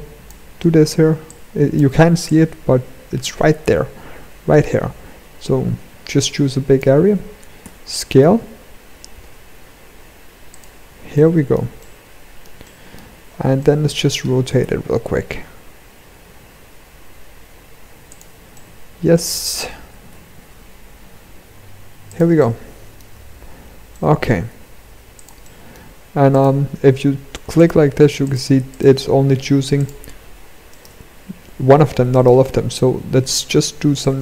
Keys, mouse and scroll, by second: 0.8 click, 7.1 s, 10.6 shift+middle click, 12.1 shift+middle click, 12.8-13.1 scroll up 2, 13.1 shift+middle click, 14.1 r, 18.0 middle click, 19.3 r, 21.9 middle click, 23.4 shift+middle click, 24.0 g, 24.9 shift+middle click, 25.8 click, 27.3 click, 28.2 click, 29.3 click, 29.6 g, 31.2 g, 33.5 click.